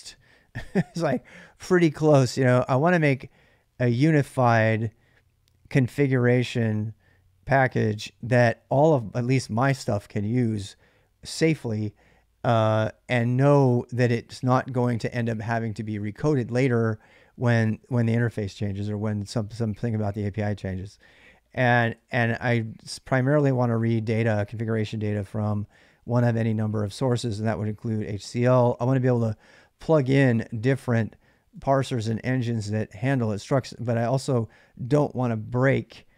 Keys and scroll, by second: 21.8-24.4 typing, 25.5-27.2 typing, 28.5 k, 28.9 k, 29.9 j, 30.1 j, 31.4-32.4 typing.